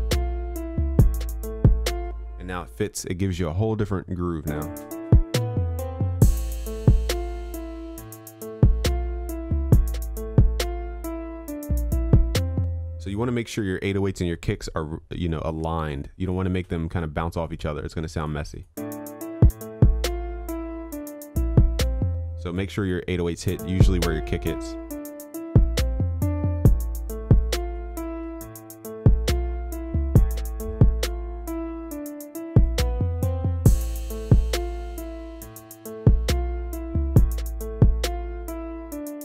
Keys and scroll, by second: 5.2 ctrl+s, 28.3 ctrl+s.